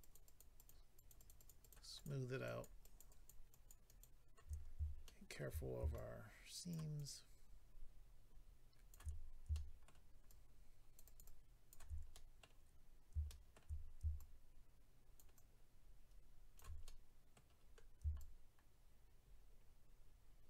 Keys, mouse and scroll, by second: 0.0 shift+click, 0.1 shift+click, 0.2 shift+click, 0.4 shift+double click, 0.5 shift+click, 0.7 shift+click, 0.9 shift+click, 1.1 shift+double click, 1.1 shift+click, 1.3 shift+click, 1.3 shift+click, 1.5 shift+double click, 1.6 shift+click, 1.7 shift+click, 1.9 shift+click, 2.0 shift+double click, 2.4 shift+click, 2.6 shift+click, 2.8 shift+click, 3.0 shift+double click, 3.1 shift+click, 3.5 shift+click, 3.8 shift+click, 4.0 shift+click, 4.5-5.0 scroll up 3, 5.0 shift+middle click, 5.5 scroll up 1, 5.9 shift+click, 6.9 shift+click, 9.1-9.5 scroll down 2, 9.5 shift+middle click, 10.2 shift+click, 11.2 shift+click, 12.1 middle click, 12.8-13.3 scroll up 2, 13.3 shift+middle click, 13.5 middle click, 13.7-14.0 scroll up 2, 14.1 shift+click, 15.3 shift+click, 16.8 middle click, 17.6 scroll up 3, 18.1 shift+click.